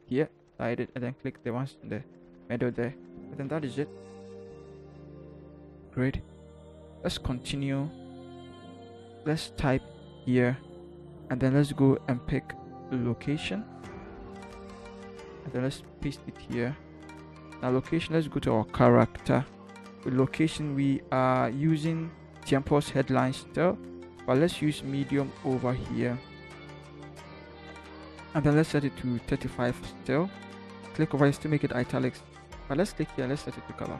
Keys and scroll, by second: 8.5 v, 9.1 t, 14.5 ctrl+c, 15.8 ctrl+v.